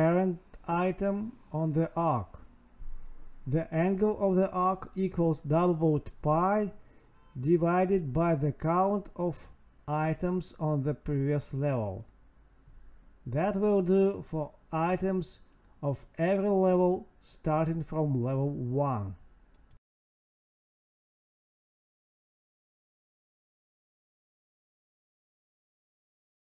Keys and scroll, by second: 1.9 Tab, 4.6 ctrl+x, 5.7 Escape, 6.1 Home, 6.4 Up, 7.3 space, 9.1 space, 9.3 space, 9.7 ctrl+v, 10.9 Up, 11.4 Right, 13.2 Escape, 13.3 Down, 13.4 Left, 15.2 Escape, 15.5 Down, 15.8 Left, 17.3 Escape, 17.4 Down, 17.5 Left, 19.2 Escape, 20.4 Down, 21.0 End, 22.1 Tab, 23.2 space, 25.0 space, 26.3 Tab.